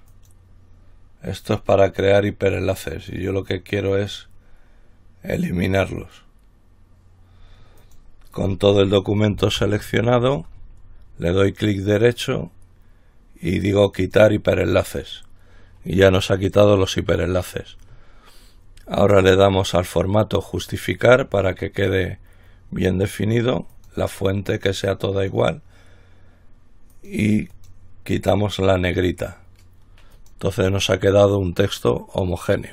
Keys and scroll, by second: 9.7 ctrl+e.